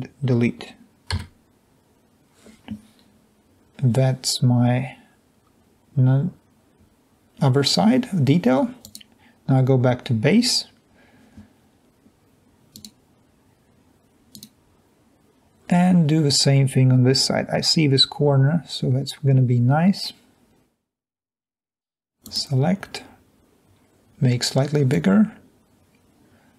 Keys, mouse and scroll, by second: 1.1 Delete, 26.0 click.